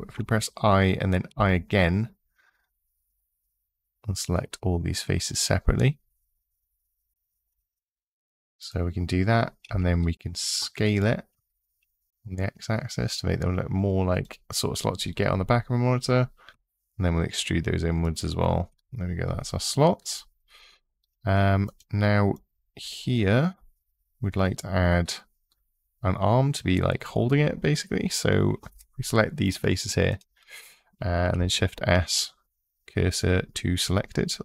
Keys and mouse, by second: 0.2 i, 1.1 i, 9.4 s, 10.5 x, 13.9 click, 16.3 e, 17.8 click, 21.5 click, 22.1 click, 29.9 click, 31.1 shift+s, 33.6 click.